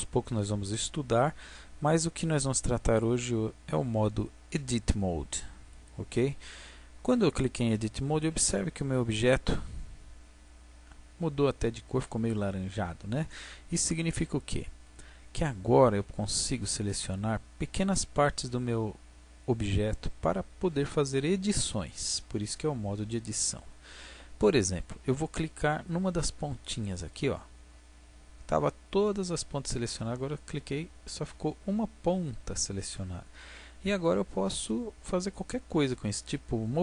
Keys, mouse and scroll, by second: 2.9-4.9 drag, 8.6-10.2 drag, 10.2 middle click, 27.1-28.7 right drag, 28.7 middle click, 31.3-33.2 middle drag, 35.2-36.8 middle drag.